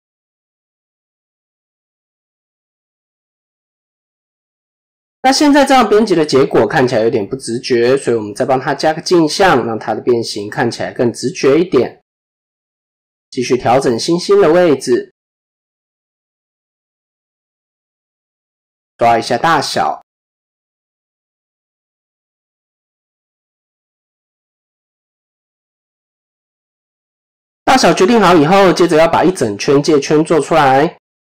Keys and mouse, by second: 0.0-0.8 drag, 0.9 middle click, 2.3 click, 4.5 middle click, 7.1-8.2 drag, 9.4-10.2 drag, 10.6 middle click, 11.7 middle click, 13.3-15.5 drag, 16.3 KP_7, 17.1 shift+middle click, 18.3 s, 22.1-24.4 drag, 24.6 s, 25.8 click, 26.8-27.4 middle drag, 30.0 KP_7.